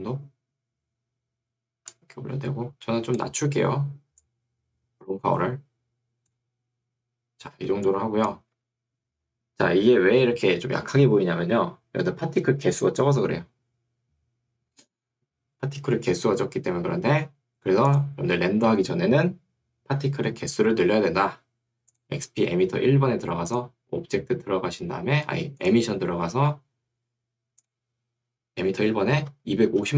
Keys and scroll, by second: 8.6 Escape, 29.4 2, 29.8 5.